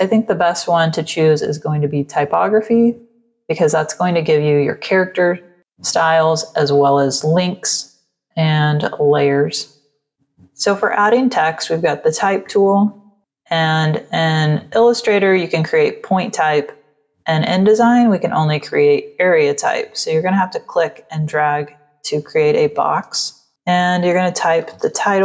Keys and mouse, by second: 3.6 click, 6.6 click, 9.8 click, 12.7 click, 18.5 click, 24.0-25.2 typing.